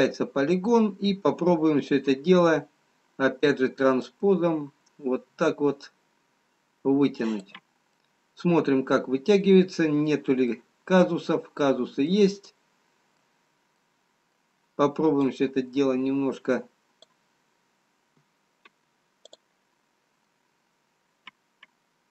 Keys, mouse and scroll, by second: 1.8 click, 4.0 click, 8.2 middle click, 11.7 middle click, 11.7-13.4 scroll up 2, 13.4 middle click, 14.9 middle click, 16.2 click, 19.8 click, 20.4 middle click.